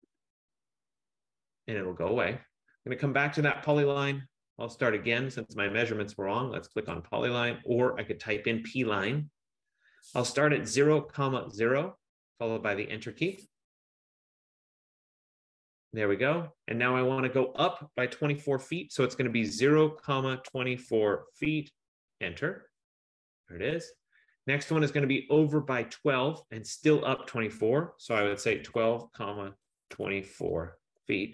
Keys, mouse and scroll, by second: 0.0-0.2 typing, 2.9 F15, 4.1 click, 7.0 click, 10.5-12.0 typing, 13.1 Return, 19.5-21.4 typing, 22.2 Return, 28.4-31.0 typing.